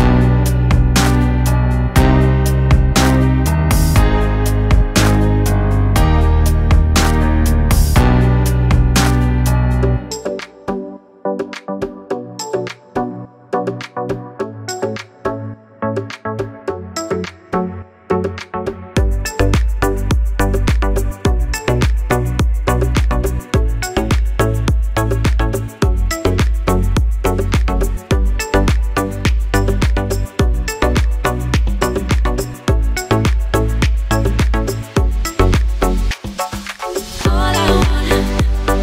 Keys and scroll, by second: 0.2 g, 3.1 KP_1, 7.1 s, 9.9 s, 13.4 s, 19.1 s, 25.5 s, 31.6 s.